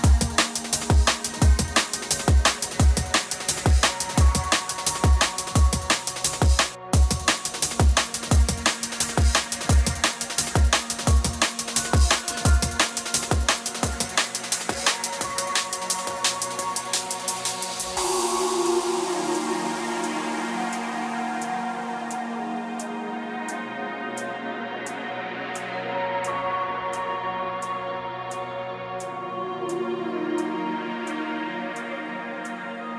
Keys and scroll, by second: 0.3 space, 0.9 space, 1.7 space, 10.0 scroll, 11.4 scroll, 12.1 scroll, 13.2 scroll, 20.9 scroll, 21.9 scroll, 22.5 scroll, 23.0 scroll, 24.8 scroll.